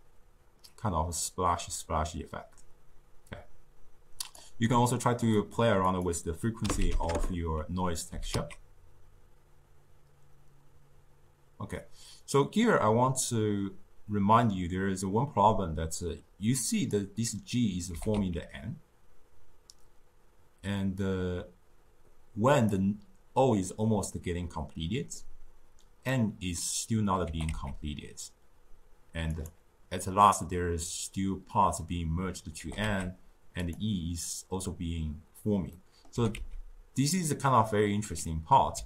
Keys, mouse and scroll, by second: 5.3 click, 5.8-8.1 drag, 8.1 g, 17.8 g, 26.0-27.2 middle drag, 27.2 g, 32.5 g, 35.6 middle click, 36.1 g.